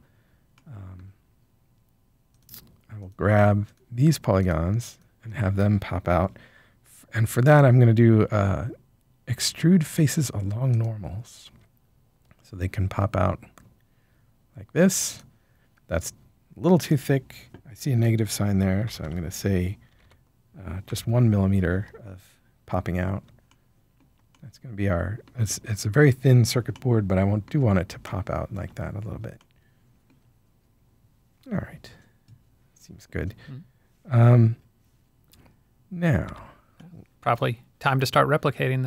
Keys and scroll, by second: 19.0-19.9 typing, 20.8 Return, 36.2 Tab.